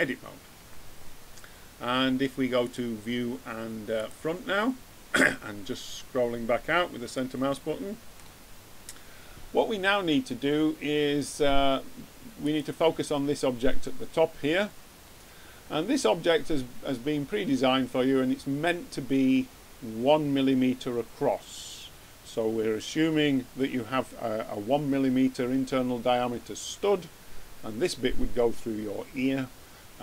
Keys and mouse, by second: 0.6 Tab, 2.5-3.7 drag, 12.3-14.1 drag, 14.7 middle click.